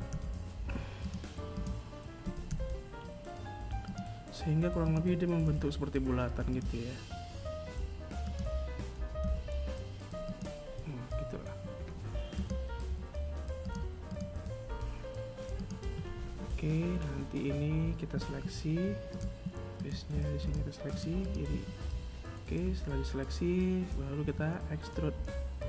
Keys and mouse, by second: 0.5 g, 3.1 right click, 3.7 g, 6.4 right click, 7.4 g, 10.5 right click, 11.1 g, 12.3 right click, 12.5 g, 16.5 ctrl+Tab, 18.0 right click, 18.6 shift+right click, 19.1 shift+right click, 19.4 shift+right click, 22.4 KP_1, 24.2 e.